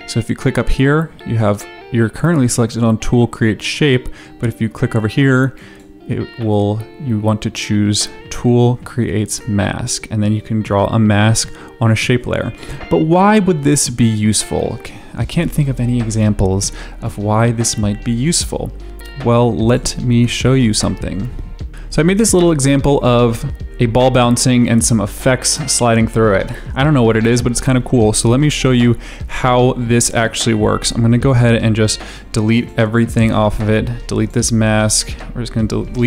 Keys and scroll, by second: 15.0 v, 21.7 space, 33.2 Delete, 34.8 Delete.